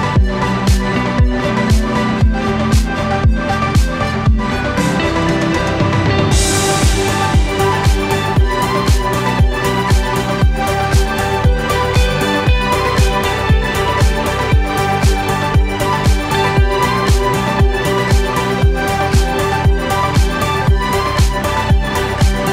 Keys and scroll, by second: 2.9 ctrl+shift+p, 20.5-22.1 typing.